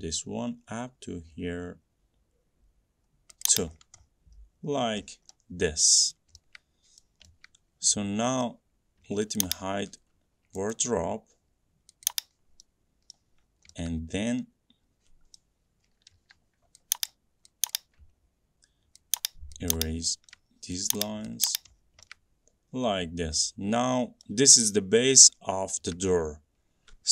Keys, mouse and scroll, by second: 3.6 click, 3.9 middle click, 4.2 middle click, 4.2 scroll, 4.8-5.5 scroll, 6.3 middle click, 6.3 scroll, 7.2 middle click, 8.6 middle click, 9.6 click, 10.9 right click, 12.2 click, 13.3 middle click, 13.6 middle click, 13.6 middle click, 13.7 middle click, 15.5 middle click, 16.3 e, 17.2 click, 17.9 click, 19.3 click, 19.9 click, 20.5 shift+middle click, 21.1 click, 21.6 click, 21.9-22.2 scroll, 24.4 middle click, 25.7 middle click, 25.7 middle click, 26.9 middle click.